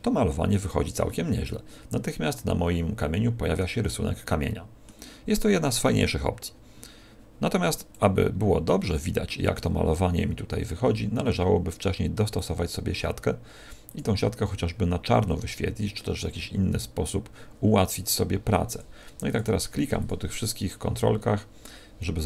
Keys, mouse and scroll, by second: 1.4 middle click, 3.8 middle click, 5.9 click, 8.3-8.6 scroll up 4, 10.8-11.5 scroll up 6, 12.3 scroll up 1, 12.3 click, 13.8 click, 14.2-15.1 scroll down 12, 15.5 scroll down 2, 15.9-16.3 scroll up 10, 18.7 click, 19.2 click, 19.9 click.